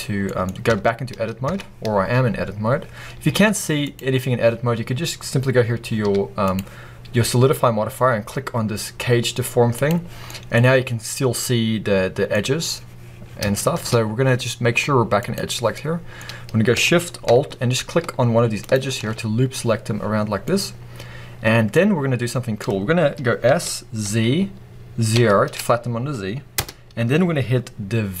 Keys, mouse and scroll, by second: 0.2-9.6 middle drag, 0.6 Tab, 3.2 z, 9.6 click, 10.1-11.3 middle drag, 10.5-11.1 scroll up 2, 11.1 scroll down 2, 12.2-12.5 scroll up 1, 13.4 scroll up 2, 13.5-15.1 shift+middle drag, 15.1 click, 15.6-18.5 middle drag, 18.5 alt+shift+click, 20.0 scroll down 2, 20.3-21.8 middle drag, 21.8-22.1 scroll up 2, 22.1-23.3 middle drag, 23.3 s, 26.5 Return, 27.2 scroll up 2, 27.8-28.2 scroll down 1.